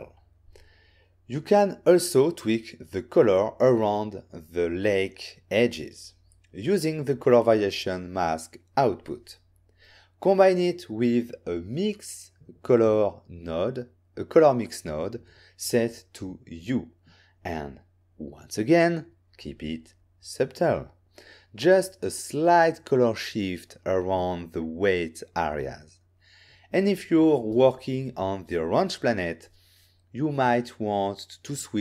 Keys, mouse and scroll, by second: 5.0 click, 5.5 shift+a, 6.1 click, 6.6-7.5 typing, 8.9 click, 9.3 click, 10.1 click, 12.1 click, 13.3 click, 13.4 click, 14.1 click, 24.9 click, 25.1 click, 26.2 m, 26.6 click.